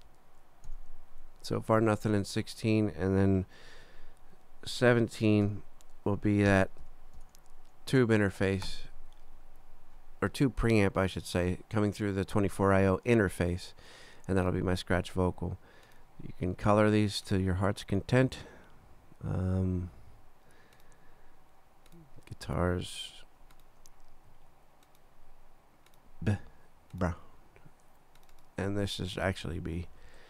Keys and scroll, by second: 0.7 shift+x, 1.3 shift+super+x, 1.9 shift+super+Down, 5.4-7.7 typing, 8.7 Return, 29.8 Left.